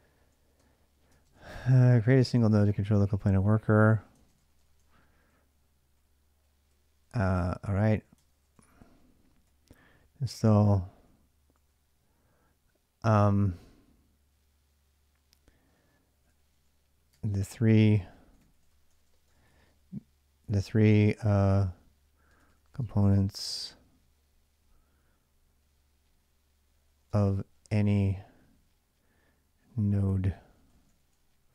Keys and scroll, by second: 0.0-11.9 typing, 4.0 ctrl+[, 4.4 Return, 15.7-22.6 typing, 26.5-27.9 typing, 30.0-31.5 typing.